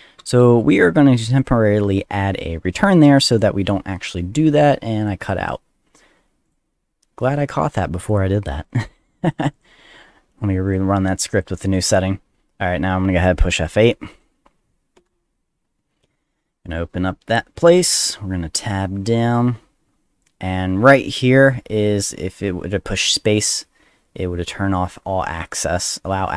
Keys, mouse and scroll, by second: 0.2 ctrl+s, 1.3 click, 3.2 click, 3.3 click, 5.0 click, 5.9 right click, 6.4 click, 8.1 click, 8.6 click, 9.2 click, 9.4 click, 9.5 click, 10.7 click, 11.3 click, 11.8 click, 14.1 click.